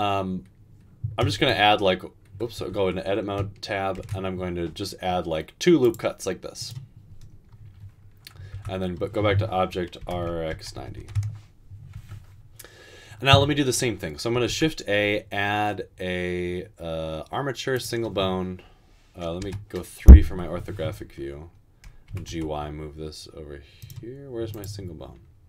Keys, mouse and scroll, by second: 1.5 ctrl+r, 2.6 Tab, 4.0 ctrl+r, 8.6 Tab, 10.0-11.1 typing, 14.5 a, 19.5 typing, 22.1 typing.